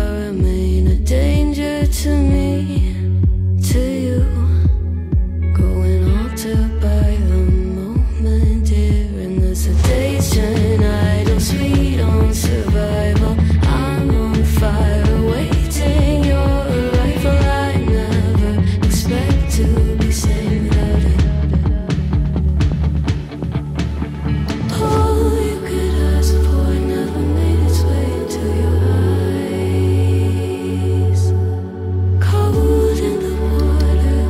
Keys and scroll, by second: 3.0 ctrl+z, 13.9 space, 23.8 ctrl+z, 26.6 ctrl+z.